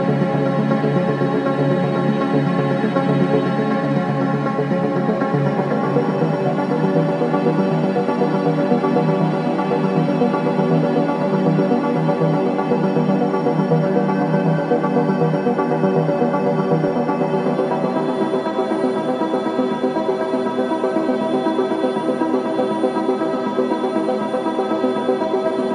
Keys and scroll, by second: 0.0 3, 4.3 4, 5.5 3, 7.1 4, 11.0 ], 12.4 4, 14.5 3, 15.0 ], 17.2 ], 17.9 ], 21.3 4.